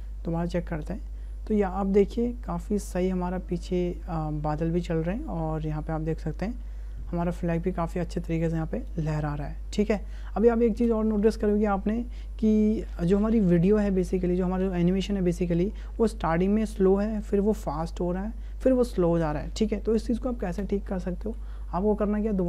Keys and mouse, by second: 0.7 space, 10.7 space, 16.1 click, 16.8 space, 20.5 space.